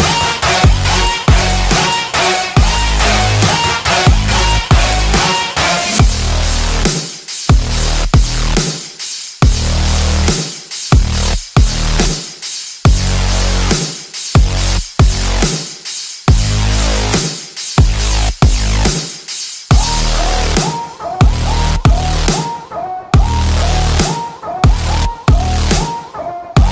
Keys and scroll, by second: 1.3 ctrl+u, 3.6 ctrl+j, 4.0 ctrl+e, 4.7 ctrl+g, 10.3 ctrl+d, 14.9 ctrl+d, 18.2 ctrl+d, 23.9 ctrl+t.